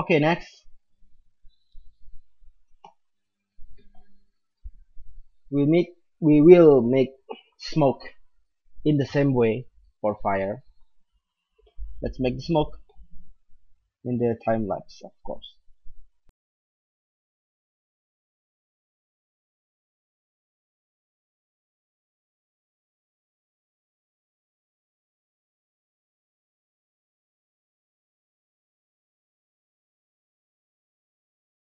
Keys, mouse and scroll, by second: 2.6 z, 2.8 z, 3.4-5.8 middle drag, 10.7-15.5 middle drag, 15.5-16.5 right drag, 16.5-17.0 drag, 16.9-18.3 middle drag, 17.8 click, 18.7 middle click, 19.8-20.2 drag, 20.5 click, 22.3-23.2 middle drag, 22.7 shift+a, 23.5 click, 23.8 middle drag, 24.2-24.5 drag, 24.5-26.2 middle drag, 27.2 click, 27.5 right click, 27.9-29.0 drag, 27.9 right click, 28.8 alt+a, 29.1-30.0 middle drag, 30.7 click, 31.0-31.6 middle drag.